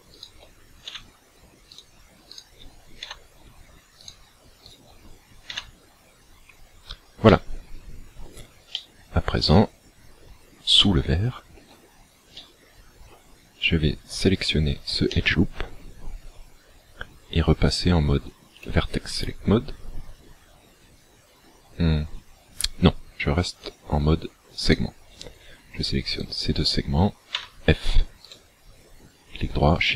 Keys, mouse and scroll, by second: 0.2 right click, 0.9 f, 1.8 right click, 2.3 shift+right click, 3.1 f, 4.0 right click, 4.7 shift+right click, 5.5 f, 6.4-7.0 scroll down 6, 7.3 middle click, 8.8 middle click, 9.8-10.4 scroll up 2, 10.4 scroll up 1, 10.8 shift+middle click, 12.4 middle click, 14.4 alt+right click, 15.2 middle click, 18.6 click, 23.6 click, 24.8 right click, 26.1 shift+right click, 27.4 f, 28.4 right click, 29.8 shift+right click.